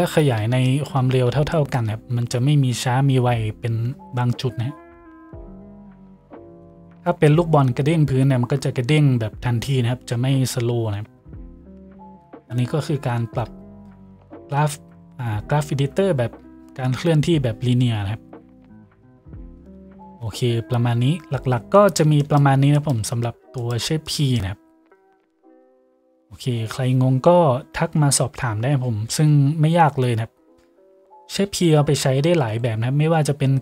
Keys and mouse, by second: 13.4 t, 16.4 t, 20.0 t.